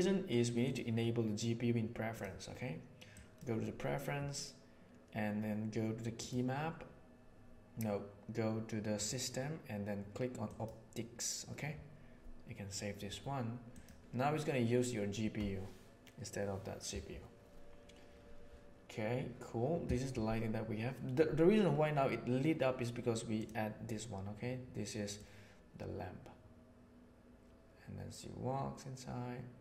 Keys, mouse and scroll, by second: 0.6-2.3 drag, 25.1-29.6 drag.